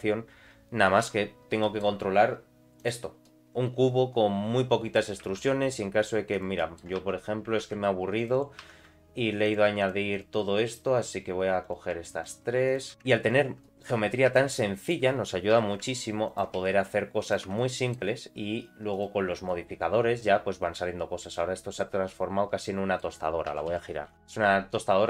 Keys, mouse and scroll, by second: 1.0 Tab, 1.6 middle click, 2.8 click, 3.2-4.9 middle drag, 5.3 ctrl+r, 6.6 middle click, 7.0 3, 7.6 ctrl+r, 8.6 3, 9.4 click, 9.8 shift+click, 10.1 shift+click, 10.7 shift+click, 11.6 click, 12.2 shift+click, 12.7 shift+click, 12.9 i, 13.6 middle click, 14.3 e, 15.5 i, 16.6 e, 17.6 middle click, 18.9 click, 19.5-21.3 middle drag, 21.5-21.8 scroll down 2, 21.8-23.0 middle drag, 23.5 r, 24.4 middle click.